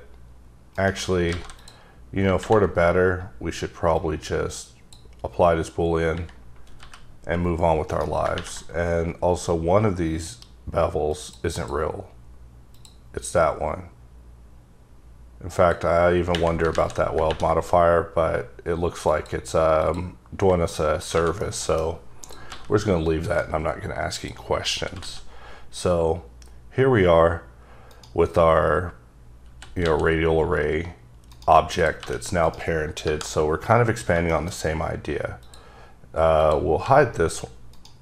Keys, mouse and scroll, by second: 0.7 right click, 1.1 scroll up 3, 1.3 alt+a, 1.6 click, 2.4 ctrl+`, 3.9 click, 6.4-6.8 scroll down 2, 6.8 g, 7.9 right click, 11.5 click, 12.7 click, 15.5 click, 16.7 ctrl+z, 19.1 click, 19.8 click, 20.7 middle click, 21.1 alt+a, 21.4 middle click, 22.2 click, 22.5 g, 23.3 right click, 24.2 click, 24.7 r, 25.0 x, 27.9 right click, 28.6-29.5 scroll up 1, 29.5 r, 29.8 x, 31.3 right click, 31.8 click, 32.0 g, 32.4 right click, 33.0 KP_Divide, 33.5 scroll up 1, 33.7-34.3 scroll down 3, 34.3 middle click, 35.4 click, 36.5 click, 36.8 g, 37.7 right click.